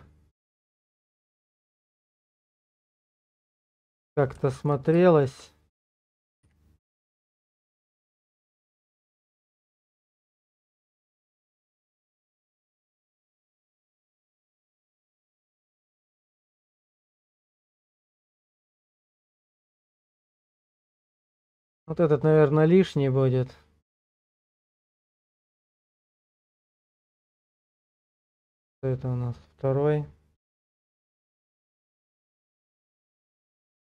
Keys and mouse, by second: 3.3 ctrl+click, 3.9 middle click, 5.1 shift+middle click, 6.4 g, 11.3 click, 11.8-13.8 middle drag, 16.6-20.0 middle drag, 20.4-21.6 middle drag, 22.3-24.0 middle drag, 25.7 click, 28.7 click, 30.4 click, 33.5 click, 33.8 click.